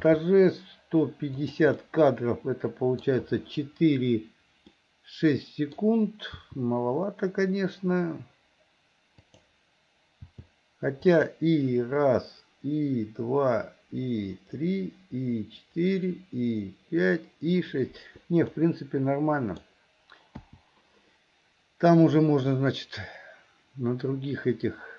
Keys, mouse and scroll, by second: 0.1 g, 1.8 scroll up 1, 1.9-3.0 middle drag, 4.7 scroll up 1, 4.8 middle click, 6.4 r, 10.3 g, 18.5-20.4 middle drag, 18.5 scroll up 1, 19.6-20.4 scroll down 1, 22.6-24.9 drag.